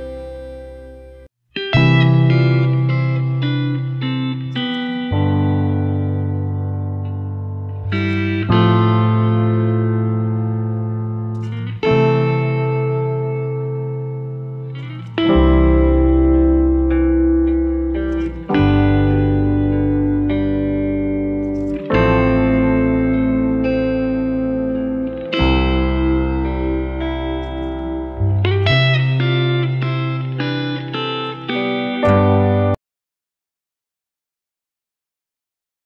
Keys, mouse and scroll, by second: 0.1 click, 0.5-1.7 scroll down 1, 2.6 click, 6.5 click, 7.3 scroll up 1, 7.7 click, 8.3 scroll up 1, 10.5 click, 17.1 scroll down 1, 18.0-19.6 scroll up 1, 19.6 click, 22.7 scroll up 1, 24.7-25.9 scroll down 1, 25.9-29.9 drag, 31.9 F9.